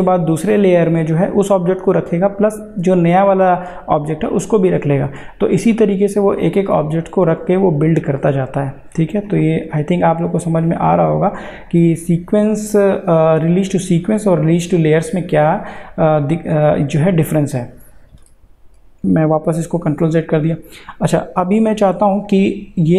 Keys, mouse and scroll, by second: 9.3 click, 17.5 click, 18.7 ctrl+z, 22.3 click.